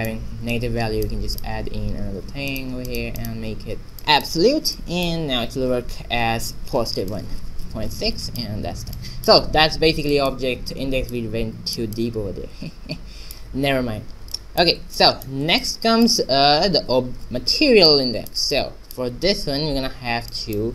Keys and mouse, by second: 2.0 shift+d, 4.0-6.3 drag, 7.1-8.8 drag, 8.9-10.3 middle drag, 11.1-13.1 drag, 13.9 middle click, 14.4 middle click, 15.7 middle click, 16.6 a, 17.9-19.6 drag.